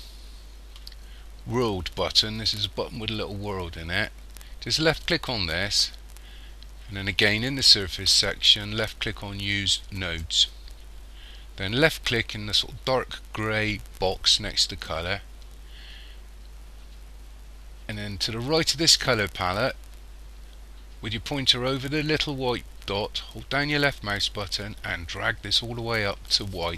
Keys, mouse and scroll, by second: 5.1 click, 10.0 click, 14.7 click.